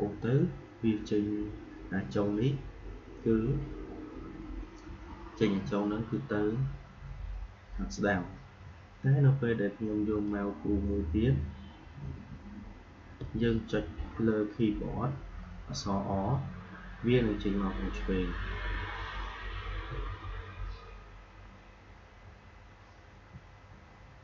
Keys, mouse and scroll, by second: 10.2-16.1 drag, 16.1-19.0 typing, 20.2-21.6 typing, 23.0-23.7 typing.